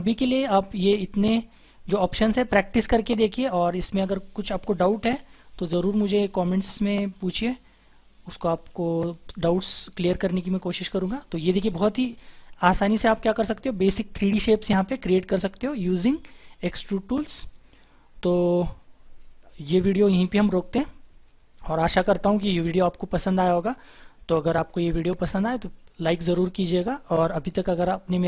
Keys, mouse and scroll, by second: 0.0-1.0 scroll up 1, 1.0-1.5 scroll down 1, 5.2 shift+F4, 7.8-8.6 scroll down 1, 8.6 scroll down 1, 8.6-10.4 scroll up 1, 10.4-11.6 scroll down 1.